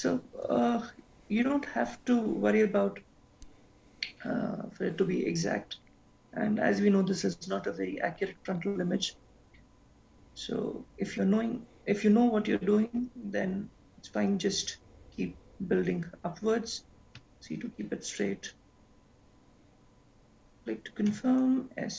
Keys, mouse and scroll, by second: 0.0 e.